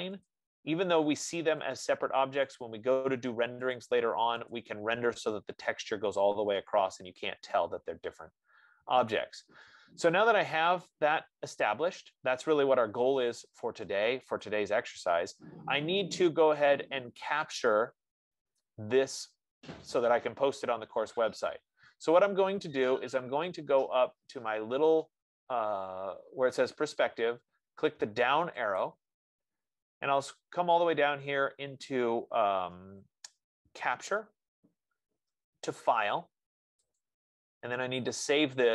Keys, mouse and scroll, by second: 0.6 click, 3.1 click, 4.3 click, 5.0 click, 9.5 right click, 12.4 middle click, 14.2 right click, 14.9 click, 29.1-34.2 drag, 37.4-38.7 drag.